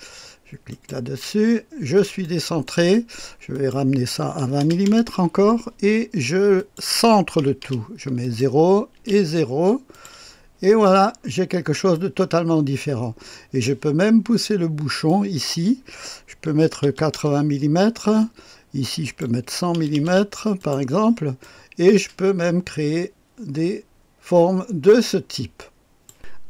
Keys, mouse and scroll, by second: 0.7 click, 1.7-2.2 scroll up 1, 2.2 click, 3.6 click, 4.4 KP_2, 4.6 KP_0, 4.9 Return, 6.6 click, 7.6 KP_0, 8.2 click, 9.0 KP_0, 9.9 click, 11.2-12.0 scroll up 1, 12.0-14.1 drag, 13.8 typing, 15.1 click, 16.6 typing, 17.1 Return, 19.0 click, 19.4 KP_1, 19.8 KP_0, 20.6 click, 21.4-22.9 drag, 22.9 typing, 26.1 click.